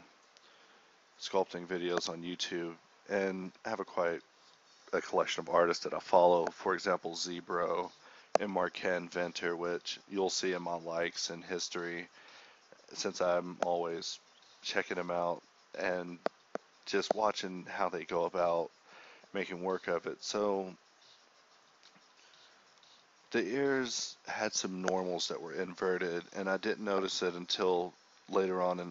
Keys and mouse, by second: 1.5-1.8 middle drag, 1.8-2.2 drag, 2.2 Tab, 2.7-3.2 a, 3.2 ctrl+n, 3.5 Tab, 4.2-4.5 middle drag, 5.6 KP_1, 6.1 ctrl+d, 6.6 ctrl+d, 7.2 ctrl+d, 8.3 [, 9.4 [, 9.5-13.7 drag, 14.5-20.5 drag, 20.5-23.1 ctrl+z, 24.4 ], 26.5-28.4 drag, 28.7-28.9 drag.